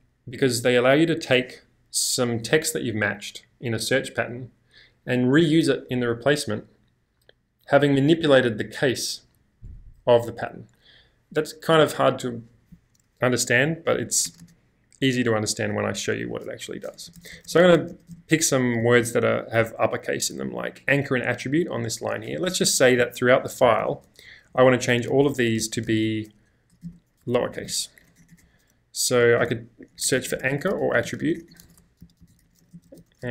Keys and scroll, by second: 14.3 space, 14.5 space, 17.0-19.0 typing, 22.4-24.3 typing, 25.9-28.3 typing.